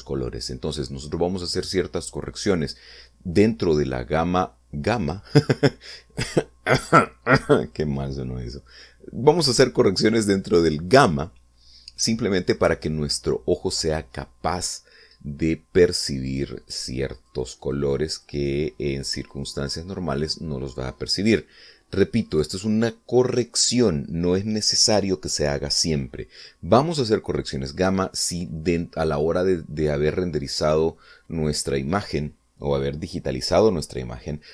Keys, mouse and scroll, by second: 16.9 click, 17.4 click, 17.7-18.9 drag, 19.6 click, 23.0 click.